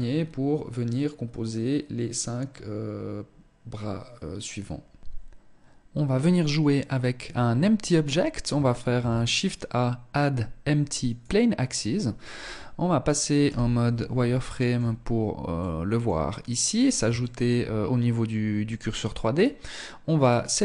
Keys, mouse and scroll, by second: 8.3 shift+a, 12.7 z, 13.7 shift+middle click, 14.3 scroll down 2, 14.7 middle click, 16.5 shift+middle click, 18.0 middle click, 19.6 right click, 20.3 shift+middle click.